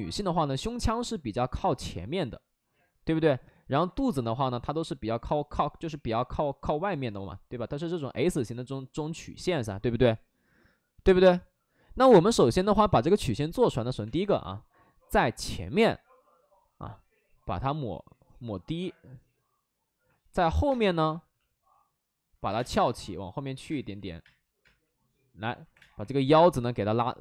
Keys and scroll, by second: 14.0 space, 20.5 2, 20.5 3, 20.6 space, 22.4-24.1 typing, 23.9 ctrl+z, 25.7 space, 25.9 3.